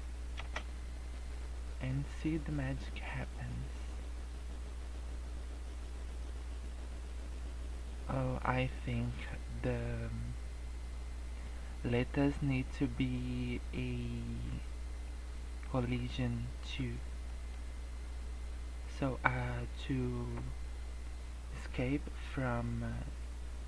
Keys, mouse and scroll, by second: 0.3 space, 9.1 Escape, 15.0 middle click, 16.1 scroll down 1, 16.4 middle click, 16.9 scroll up 1, 17.2 middle click.